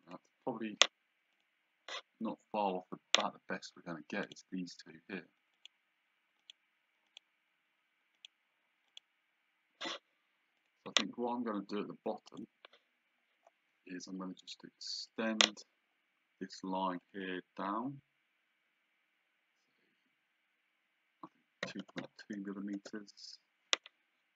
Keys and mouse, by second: 0.1 click, 1.3 click, 4.2 click, 5.6 click, 10.6 click, 12.3 click, 14.4 click, 17.0 click, 21.6 KP_2, 22.7 KP_Enter.